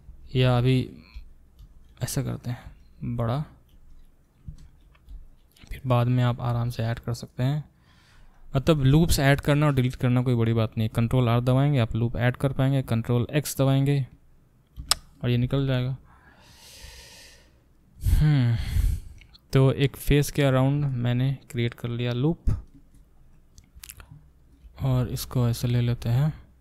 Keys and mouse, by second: 0.1 ctrl+z, 0.4 ctrl+z, 1.6 e, 3.7 r, 5.1 e, 6.5 e, 8.3 click, 8.4-17.2 alt+middle drag, 11.4 ctrl+r, 14.8 ctrl+x, 17.2-24.0 drag, 24.0 shift+middle click, 24.3 shift+click, 24.4-26.6 shift+middle drag, 24.9 e, 25.9 r.